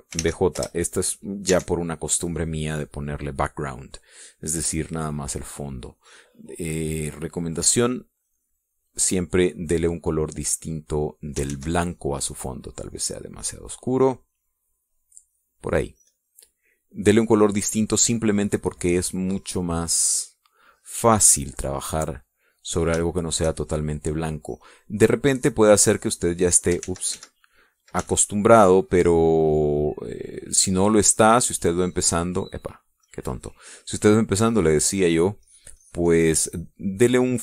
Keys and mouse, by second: 1.2 Caps_Lock, 1.6 b, 2.0 Return, 3.0 Caps_Lock, 5.6 click, 7.0-9.0 drag, 9.7 click, 13.0 ctrl+z, 14.2-15.4 drag, 16.0 click, 17.6 click, 23.2 click, 23.8 click, 24.6 shift+click, 25.5 click, 26.6-28.0 drag, 28.3 ctrl+z, 29.5 ctrl+z, 30.3 click, 32.0-33.4 drag, 34.5 click, 35.6-37.4 drag.